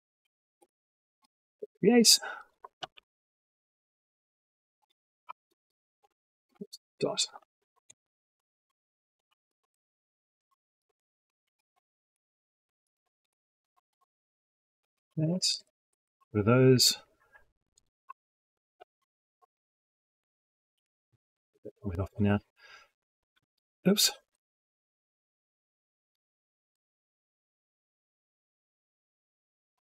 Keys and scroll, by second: 2.6 ctrl+c, 5.1 ctrl+v, 7.7 ctrl+shift+Left, 8.1 ctrl+shift+Right, 9.0 ctrl+c, 9.5 ctrl+Left, 9.8 ctrl+Right, 10.1 ctrl+c, 10.8 ctrl+Left, 11.1 ctrl+v, 12.0 ctrl+Left, 12.3 ctrl+v, 13.1 ctrl+Left, 13.4 ctrl+v, 14.4 ctrl+y, 18.6 ctrl+c, 19.3 ctrl+v, 20.6 ctrl+y, 26.2 ctrl+c, 27.3 ctrl+v, 27.9 ctrl+Left, 28.1 ctrl+v, 29.1 ctrl+Left, 29.4 ctrl+v.